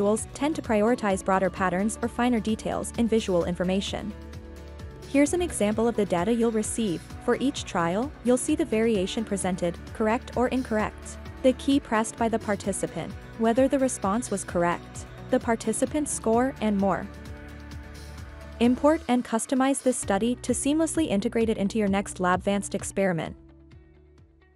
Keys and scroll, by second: 2.7 n.